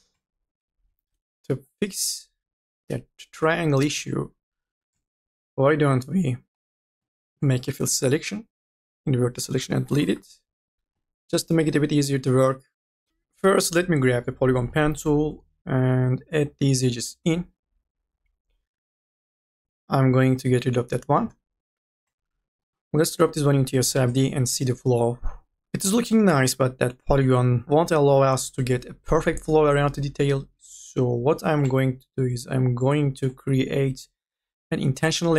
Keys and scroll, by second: 0.0-3.4 typing, 4.5 2, 7.9 u, 8.3 f, 9.4-11.1 typing, 9.6 Delete, 13.1 ctrl+z, 15.8 ctrl+z, 18.1 e, 25.6 q, 27.6 q.